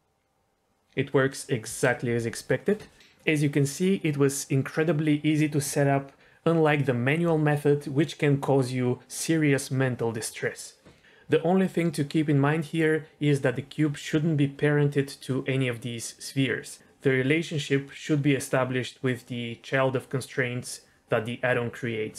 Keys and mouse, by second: 1.6 space.